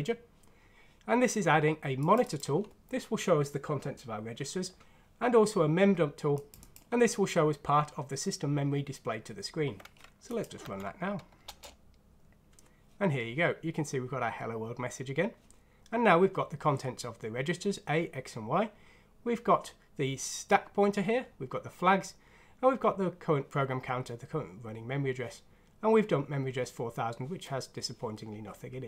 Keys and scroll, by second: 10.6 F6, 11.4 Return.